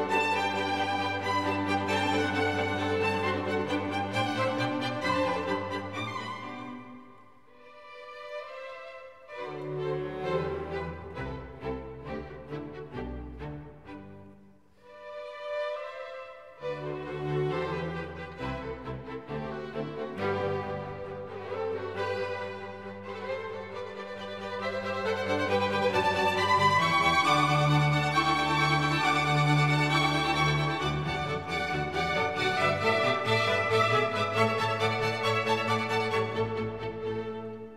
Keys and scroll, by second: 0.5 l.